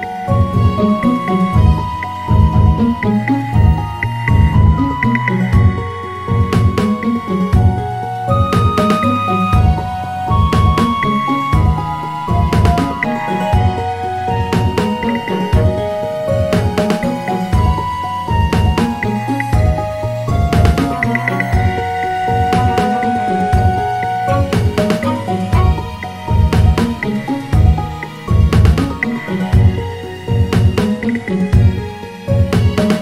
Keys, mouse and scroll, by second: 2.7 shift+a, 11.1 s, 13.9 s, 15.9 g, 18.5 s, 29.7 s.